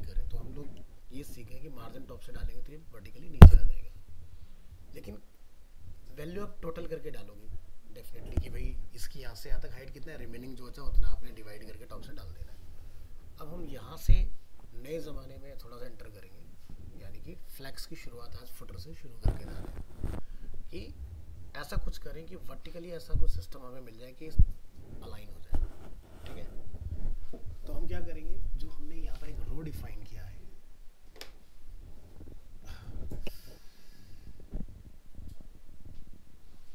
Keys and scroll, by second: 29.1 alt+Tab.